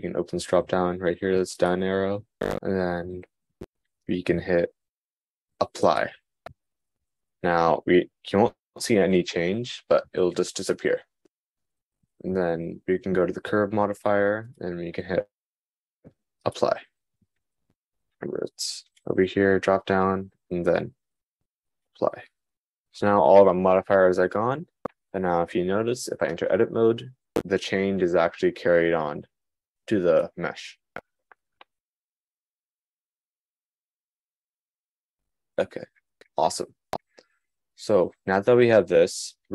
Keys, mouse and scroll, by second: 18.6 super+z, 26.5 Tab, 28.6 Tab, 36.9 click.